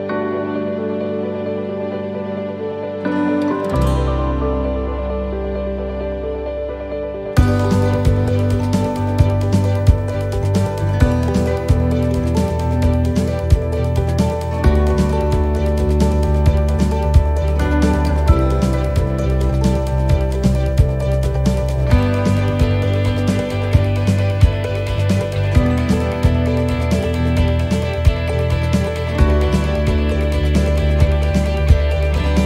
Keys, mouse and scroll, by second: 0.6 click, 8.8 middle click, 9.2-9.9 scroll down 10, 11.0 s, 13.7 click, 14.9-15.4 scroll up 3, 15.4 shift+middle click, 15.9-16.8 scroll up 4, 17.1 shift+middle click, 17.9 middle click, 18.3 scroll down 1, 19.4 scroll down 1, 19.9 right click, 21.5 click, 22.5 right click, 24.1 scroll down 2, 26.3 click, 27.1 click, 30.4-30.9 scroll up 1, 31.4 middle click, 31.4 scroll up 2.